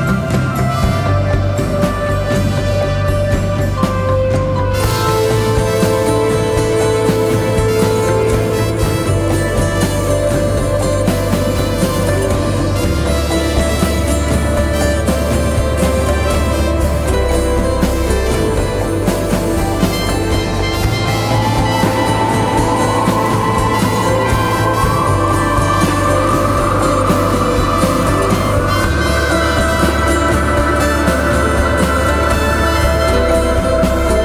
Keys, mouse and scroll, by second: 1.9 double click, 20.8 ctrl+t, 22.0 alt+shift+click, 25.4 alt+shift+click, 28.9 Return.